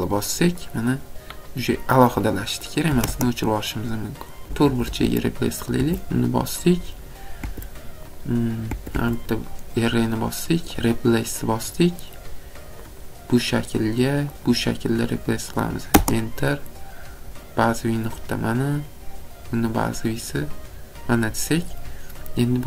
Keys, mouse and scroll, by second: 1.5 scroll, 3.0 click, 3.0 typing, 3.7-4.4 scroll down 1, 4.4 click, 4.4 typing, 4.7 Escape, 4.9 Escape, 5.4 click, 5.8 Escape, 5.8 click, 6.8 click, 7.5 Escape, 8.5 click, 8.6 click, 9.1 Escape, 10.2 click, 10.9 click, 13.0 click, 14.4 click, 18.4 click, 20.1 click, 21.9 scroll.